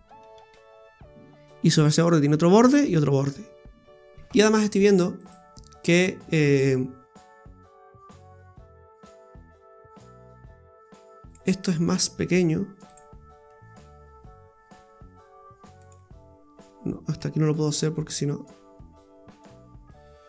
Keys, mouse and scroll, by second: 4.1 shift+middle click, 4.1 scroll up 2, 5.2 right click, 6.5 click, 8.1 right click, 8.5 alt+shift+right click, 8.7 right click, 10.2 shift+s, 11.6 s, 12.9 click, 13.5 s, 17.2 s.